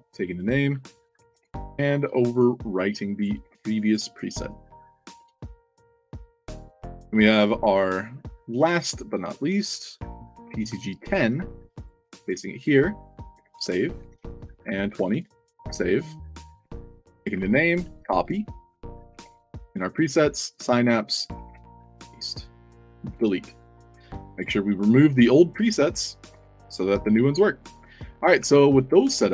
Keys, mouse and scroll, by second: 0.3 click, 1.0 click, 1.2 ctrl+v, 1.9 click, 3.1 click, 3.4 ctrl+v, 3.8 click, 5.5 click, 6.0 f, 8.5 click, 9.9 click, 10.3 ctrl+c, 10.7 click, 11.7 click, 11.9 click, 12.2 ctrl+v, 12.5 click, 13.8 click, 14.0 ctrl+v, 14.9 2, 17.1 click, 17.7 ctrl+c, 18.1 click, 18.8 click, 19.1 ctrl+v, 19.9 click, 21.1 click, 21.4 ctrl+v, 21.7 click, 24.1 drag, 24.8 drag, 27.4 scroll up 2, 28.3 a.